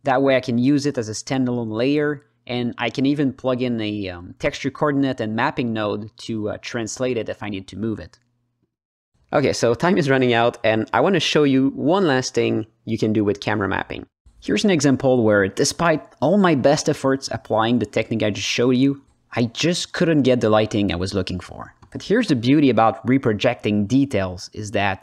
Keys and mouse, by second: 0.0 click, 0.5 h, 0.9 alt+middle click, 1.2-2.8 drag, 3.0 click, 3.3 h, 3.5 middle click, 4.4 ctrl+t, 4.8 middle click, 5.1 click, 6.1 click, 7.3 ctrl+shift+z, 7.4-9.2 shift+drag, 9.2-10.4 alt+middle drag, 11.1 KP_0, 12.6 alt+shift+middle click, 15.1 click, 16.7 shift+a, 20.4 ctrl+space, 20.8 ctrl+alt+middle click, 21.3 shift+a, 24.6-25.0 drag.